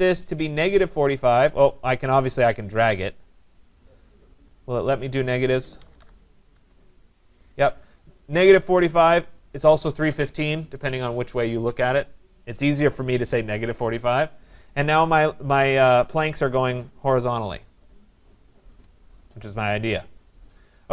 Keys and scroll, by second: 6.5 Tab.